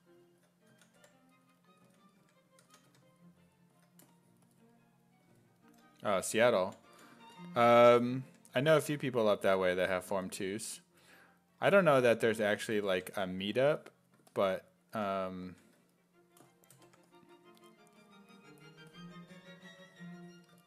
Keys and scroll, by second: 0.0-3.4 typing, 6.6 ctrl+z, 6.9 ctrl+z, 7.8 1, 8.3 1, 13.1 1, 14.9 1, 15.5 1, 16.9 1.